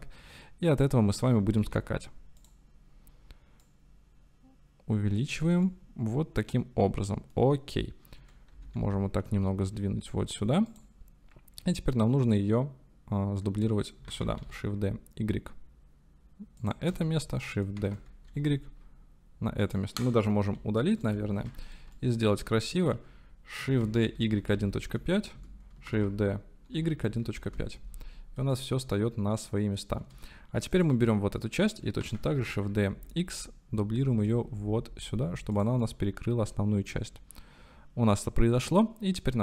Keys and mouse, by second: 1.4 g, 1.6 y, 2.4 click, 3.7-5.4 drag, 5.8-7.4 shift+middle drag, 8.5 g, 8.8 y, 9.4 x, 10.7 click, 11.9-12.5 shift+middle drag, 14.1 shift+d, 14.4 y, 17.1 shift+middle click, 17.8 shift+d, 18.3 y, 19.6 click, 20.5 Delete, 21.1 click, 21.1 Delete, 22.0 shift+click, 22.7 click, 23.7-24.8 typing, 25.4 KP_Enter, 25.9-27.3 typing, 27.5 KP_Enter, 28.6-30.0 shift+drag, 30.7 click, 32.0 shift+d, 32.4 y, 32.9 x, 35.5 click, 36.0-39.0 middle drag.